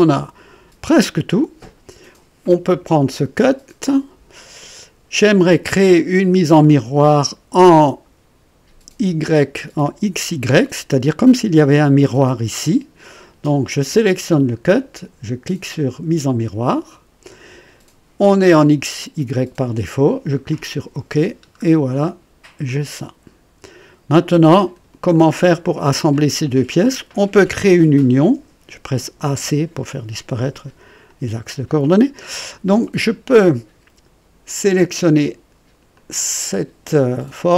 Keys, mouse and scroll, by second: 2.8 click, 5.9-7.3 drag, 16.7 click, 20.4 click, 21.3-21.6 scroll down 1, 21.9 right click, 22.6-24.9 drag, 25.1 click, 26.9 click, 28.9-29.8 typing, 30.3 click, 31.3 scroll up 1, 31.8 right click, 34.6 click, 35.9 click.